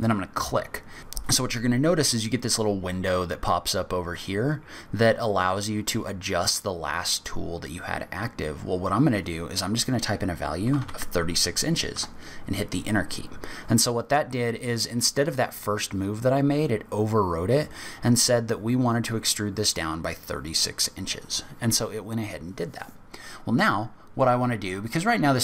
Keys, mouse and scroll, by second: 24.2 middle click, 24.8-25.4 scroll down 1.